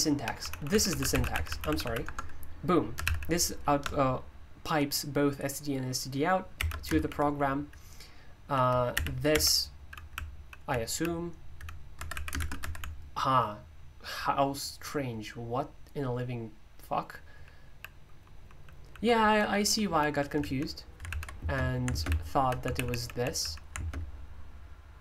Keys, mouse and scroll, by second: 0.0-3.5 typing, 2.0 Return, 6.3-7.1 typing, 8.9-13.5 typing, 17.4-23.4 typing, 21.1 ctrl+p, 23.8 alt+space.